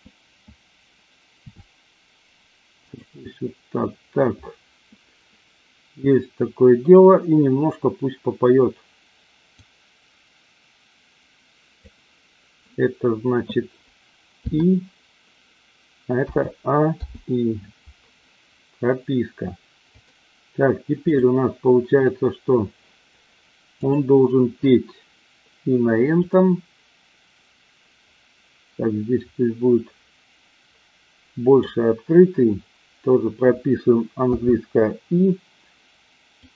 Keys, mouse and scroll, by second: 1.5 r, 9.7-11.9 drag, 14.4 i, 16.3 a, 17.0 i, 19.8-21.2 drag, 23.7 click, 26.2-31.6 drag, 34.2 i, 36.4-36.5 drag.